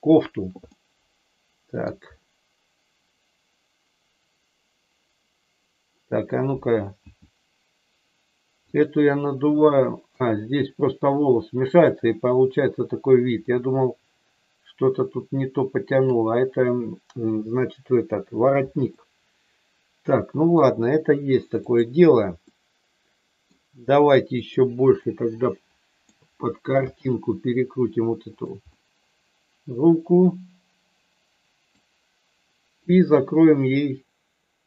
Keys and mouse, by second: 0.7-1.8 middle drag, 7.0 s, 8.7 click, 9.4 middle click, 13.4-16.1 middle drag, 18.9-20.4 middle drag, 21.6 click, 22.4-23.5 middle drag, 24.5 click, 24.9-26.1 middle drag, 26.8 r, 28.3 click, 28.6-31.7 middle drag.